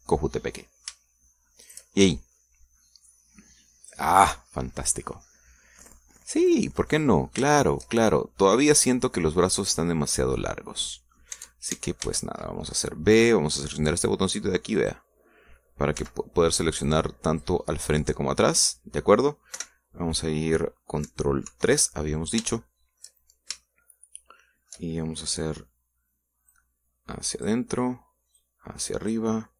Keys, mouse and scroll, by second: 0.8 right click, 1.1 middle click, 2.7 shift+right click, 2.9 shift+click, 2.9 shift+middle click, 3.3 right click, 4.1-5.1 drag, 5.8 middle click, 6.8-8.1 middle drag, 8.2 scroll up 1, 8.6 shift+middle click, 11.2-12.4 middle drag, 12.4 Tab, 13.1 a, 15.8 click, 17.0 b, 17.9 click, 18.7-20.3 middle drag, 20.6 KP_1, 22.5 ctrl+KP_3, 23.6 shift+middle click, 24.7-25.9 shift+middle drag, 27.5-28.7 drag, 29.4 click.